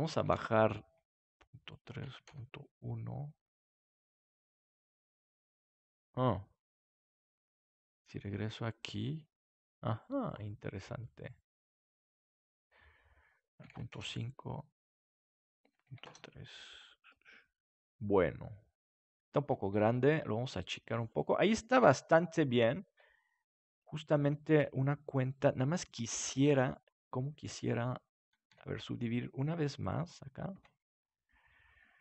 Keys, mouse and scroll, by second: 1.6-5.8 drag, 7.9-9.3 drag, 11.0-12.7 middle drag, 13.4-15.3 drag, 15.4-17.1 drag, 16.8 middle click, 19.7 s, 21.2-22.9 drag, 21.7 KP_7, 23.6 s, 24.6-25.9 drag, 26.4 ctrl+s, 27.5 Tab, 28.5 w, 31.9 Tab.